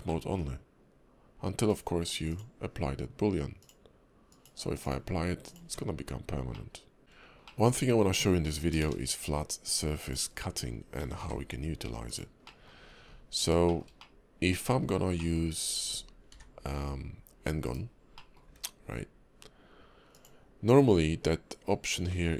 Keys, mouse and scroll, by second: 0.1 middle click, 1.7 click, 2.3 click, 3.6 click, 4.3 click, 4.8 click, 5.4 click, 5.6 Tab, 6.1-6.7 scroll up 2, 6.5 middle click, 7.0 shift+middle click, 7.0 scroll down 4, 7.0 `, 7.0 KP_5, 7.2 scroll up 1, 7.4 middle click, 8.8 shift+a, 10.7 scroll down 3, 11.0 g, 12.4 middle click, 12.8 scroll up 3, 13.0 KP_5, 13.7 shift+middle click, 13.9 scroll up 1, 14.0 middle click, 14.7 scroll down 1, 14.8 scroll up 2, 15.2 middle click, 16.3 d, 18.2 middle click, 18.4 `, 20.1 click.